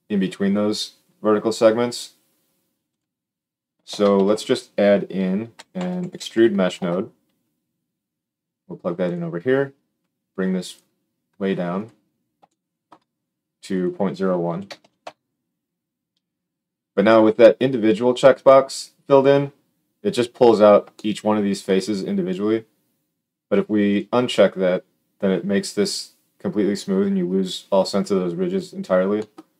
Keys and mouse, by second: 2.8 click, 3.8 shift+a, 10.6-11.8 drag, 11.8-13.6 middle drag, 13.6-23.9 drag, 23.9-29.5 middle drag.